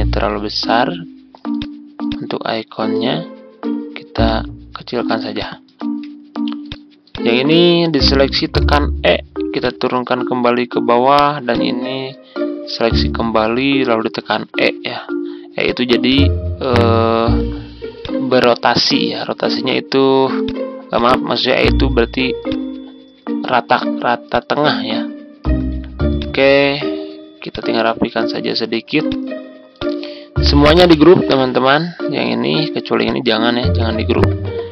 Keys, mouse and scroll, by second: 1.5 click, 3.1-3.4 ctrl+scroll up 1, 4.2 ctrl+click, 5.3 click, 5.7-6.6 ctrl+scroll down 1, 6.6 click, 8.4 e, 9.5-14.2 drag, 14.2 e, 15.6 click, 17.1 ctrl+z, 18.0-24.2 drag, 24.7-25.0 ctrl+scroll down 1, 26.1-28.7 drag, 29.0-31.6 drag, 33.0 shift+click.